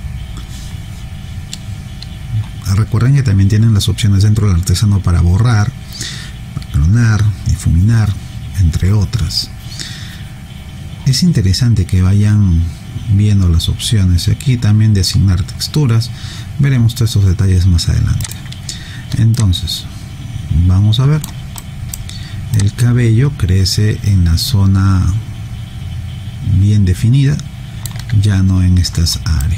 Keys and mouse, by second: 18.2 click, 19.4 alt+click, 21.6 alt+right click, 22.5 alt+click, 29.1 alt+right click.